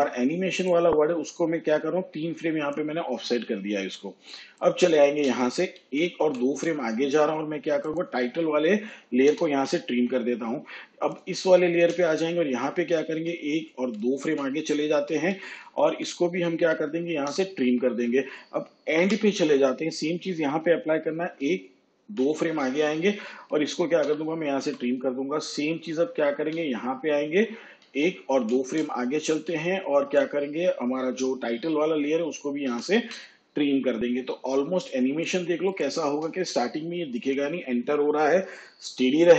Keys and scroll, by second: 5.8 ctrl+Right, 9.3 alt+[, 13.0 ctrl+Right, 15.9 ctrl+Down, 17.3 alt+[, 19.0 End, 21.2 ctrl+Left, 24.0 alt+], 26.4 j, 27.8 ctrl+Left, 30.0 ctrl+Up, 32.7 alt+], 36.0 space.